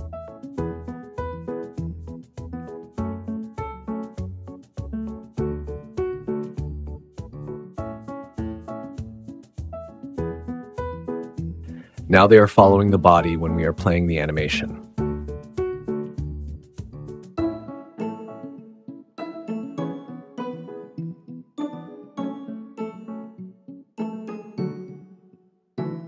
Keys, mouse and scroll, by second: 0.8 ctrl+p, 1.7 ctrl+p, 1.8 click, 4.2 ctrl+p, 5.0 click, 5.6 click, 6.2 ctrl+p, 7.0 click, 7.2 click, 7.8 shift+click, 8.0 ctrl+p, 11.1 Tab, 12.2 click, 13.2 space, 24.6 space.